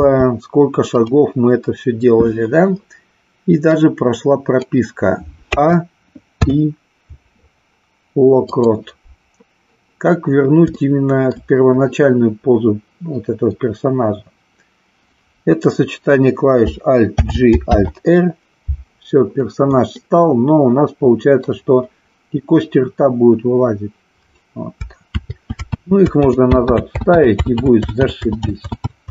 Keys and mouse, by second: 0.1 r, 1.0 click, 3.6-4.7 drag, 10.9 shift+middle click, 20.0-21.3 middle drag.